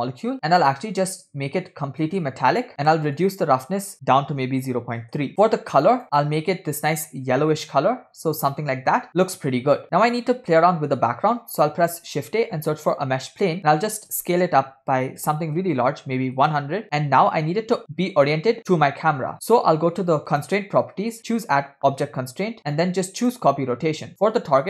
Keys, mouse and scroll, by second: 0.7-1.2 scroll down 4, 1.2 scroll down 1, 2.1 click, 3.5-5.3 drag, 5.3-5.9 scroll up 1, 6.0 click, 11.9 shift+a, 14.7 s, 20.3 click, 21.2-23.7 drag.